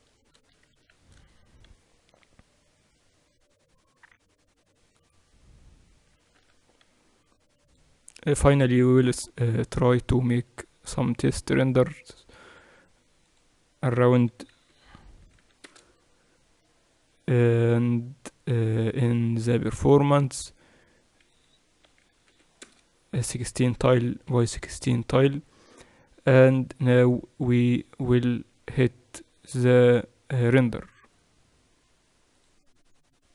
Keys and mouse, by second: 1.9 shift+z, 7.0 z, 8.3-16.1 drag, 16.1 0, 19.3 middle click, 19.5 middle click, 20.2-23.7 middle drag, 23.7 click, 24.1-25.9 drag, 27.8-29.5 drag, 33.0 click.